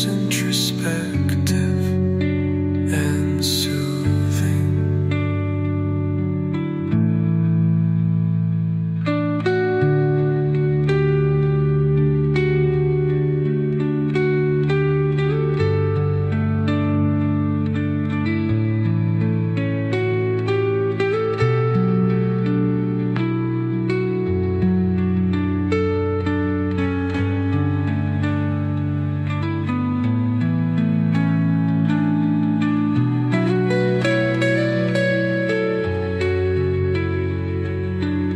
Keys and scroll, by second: 5.3 3, 5.6 Return, 8.4-9.3 typing, 9.4 Return.